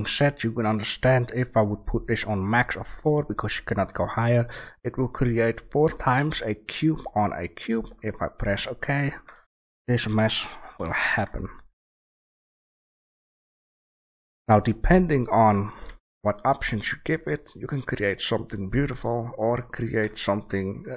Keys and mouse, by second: 8.7-11.8 middle drag, 10.1 g, 12.2 a, 12.5 click, 13.4 g, 13.6-15.2 right drag, 15.8 a, 16.4 right drag, 17.5-20.1 right drag.